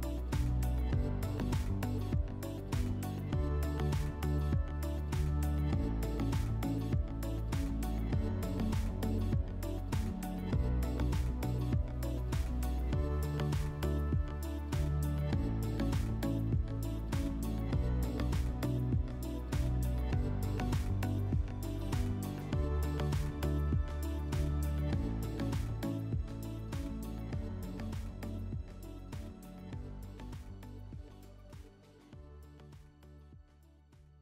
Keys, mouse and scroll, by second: 0.5 alt+middle click, 4.3 click, 5.6 alt+middle click, 6.8 right click, 7.4 click, 9.0 click, 10.4 click, 15.4 alt+middle click.